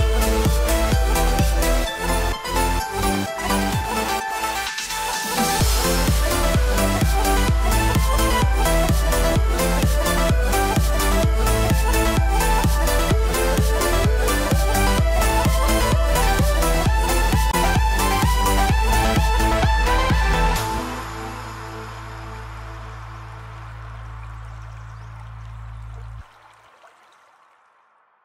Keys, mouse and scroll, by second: 0.6 middle click, 1.0 scroll up 2, 1.1 middle click, 2.4 middle click, 3.3 shift+middle click, 3.6 middle click, 4.2 middle click, 4.4-4.8 scroll up 1, 4.8 middle click, 6.3 scroll down 5, 6.5 middle click, 7.0 alt+a, 7.1-7.6 scroll down 2, 7.4 middle click, 7.6-8.2 scroll up 6, 7.7 shift+middle click, 8.2 shift+middle click, 8.5 middle click, 9.5 alt+click, 9.8 middle click, 10.9 e, 13.3 click, 14.2 middle click, 15.3 e, 17.1 click, 18.2 s, 19.5 alt+a, 19.7 Tab, 20.1 alt+a, 20.2-20.7 scroll down 2, 20.4 middle click, 22.2-22.6 scroll down 7, 22.6 shift+middle click, 22.9 middle click, 23.1 scroll down 1, 23.3 shift+middle click, 23.8-24.5 scroll up 5, 24.0 shift+middle click, 24.5 middle click, 26.2 middle click, 26.2 scroll down 3, 26.4 middle click, 26.6 shift+middle click.